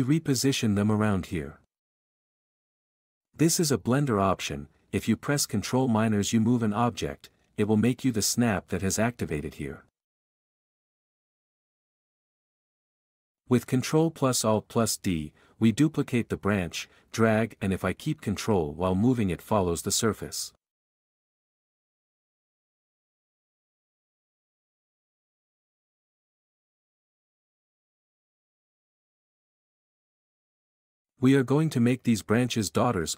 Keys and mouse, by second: 0.0 g, 0.2 s, 0.8 click, 1.3 ctrl+a, 1.5 g, 6.4 g, 17.9 ctrl+a, 18.9 g, 23.0 g, 32.8 b.